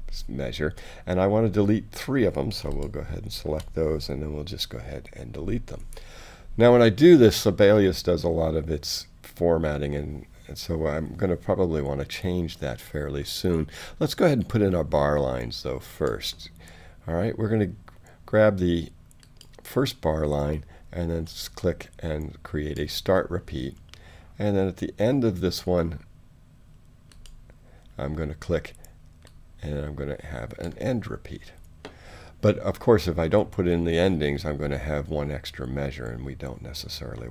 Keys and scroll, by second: 5.3 BackSpace.